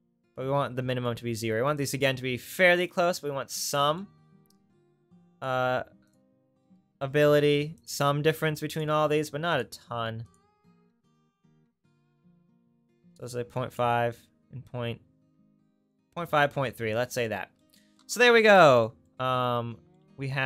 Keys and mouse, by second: 9.5-20.4 drag.